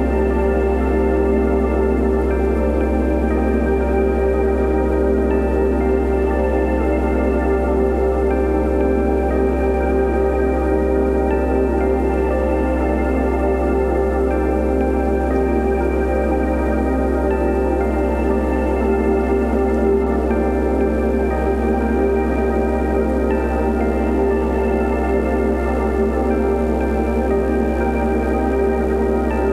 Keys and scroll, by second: 8.2 space, 17.0 b, 17.4 2, 18.3 ], 23.5 ], 24.8 [, 26.4 ], 28.1 [.